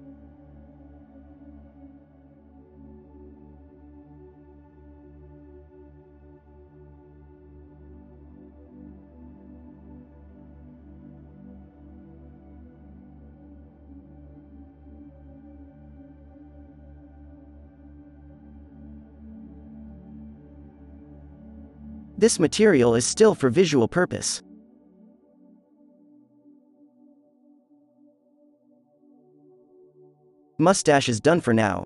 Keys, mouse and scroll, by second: 2.6 alt+a, 3.1 f, 3.8 f, 4.2 f, 4.6-4.9 drag, 6.4-6.9 middle drag, 6.9 alt+a, 7.3 z, 12.4 alt+a, 13.3 n, 13.9 n, 14.0-14.4 drag, 18.5-20.8 drag, 20.9 click, 21.1 KP_Decimal, 22.1 click, 23.1 click, 23.4 click, 24.5 click, 26.1 alt+a, 29.4 alt+a.